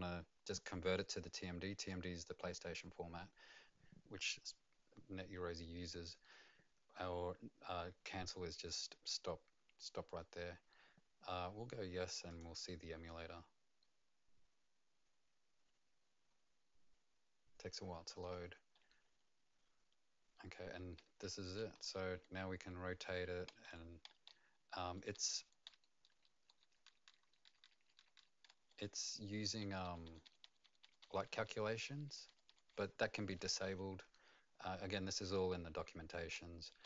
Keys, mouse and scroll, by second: 12.3 click, 22.3-33.4 typing, 36.3 e.